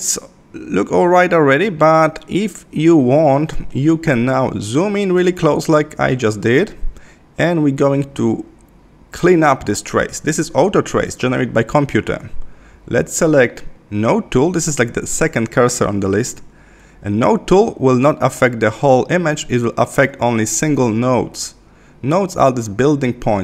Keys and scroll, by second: 3.8 super+-.